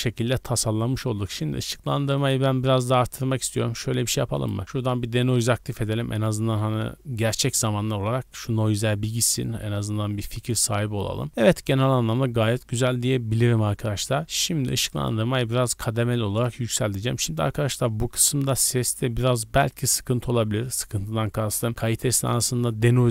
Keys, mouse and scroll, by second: 2.1 click, 3.2 click, 4.4 click, 4.9 scroll down 1, 14.9-17.9 drag.